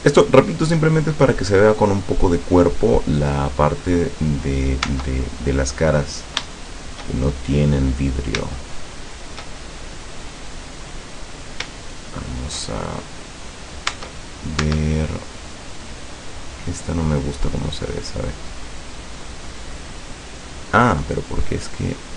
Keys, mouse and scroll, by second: 4.9 Tab, 5.8-6.2 scroll up 2, 6.2-6.6 scroll down 3, 6.6-8.6 shift+middle drag, 8.6-11.0 shift+middle drag, 11.2-11.6 scroll up 1, 11.8 shift+middle click, 14.0 Tab, 14.7 Tab, 15.1 middle click, 16.0 scroll up 1, 18.6 right click, 19.2 right click, 19.6 right click, 19.9 right click, 21.0-22.1 middle drag.